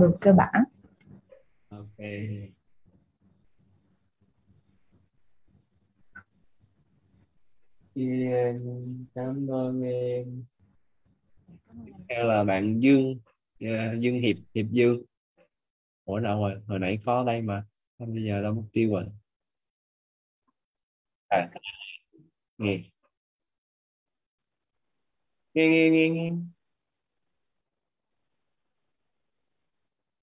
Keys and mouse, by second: 1.7 click, 8.4 click, 23.6 click, 29.5 click.